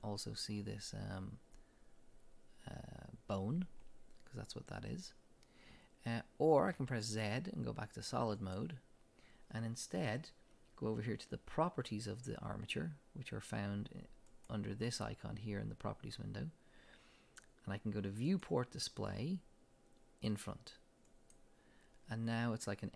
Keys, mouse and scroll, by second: 6.7 z, 13.5 click, 18.3 click, 21.1 click.